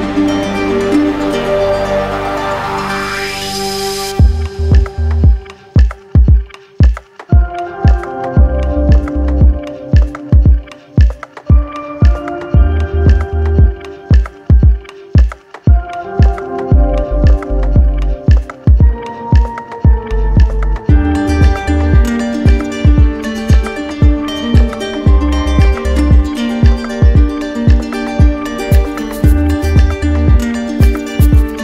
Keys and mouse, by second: 1.2 ctrl+z, 3.1 right click, 5.2 right click, 7.3 right click, 8.1 alt+right click, 11.6 z, 12.5 click, 13.5 right click, 14.7 click, 15.8 alt+click, 16.7 right click, 18.0 click, 19.8 click, 21.3 click, 22.1 ctrl+z, 22.7 right click, 24.1 click, 26.1 click, 28.2 click, 29.2 click, 30.3 right click, 31.4 click.